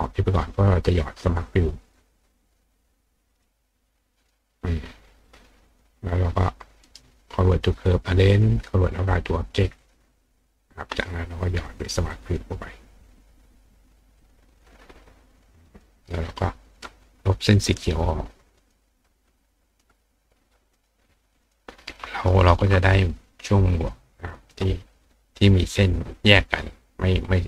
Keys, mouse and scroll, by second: 1.4-2.5 drag, 3.4 click, 5.6 click, 6.3 click, 6.8 right click, 8.3 click, 9.8 click, 12.1 click, 13.1 click, 14.2 click, 14.5 click, 15.7 click, 17.7 click, 18.6 click, 19.7 click, 20.7 click, 21.4 click, 22.3 shift+click, 23.7 click, 24.2 click.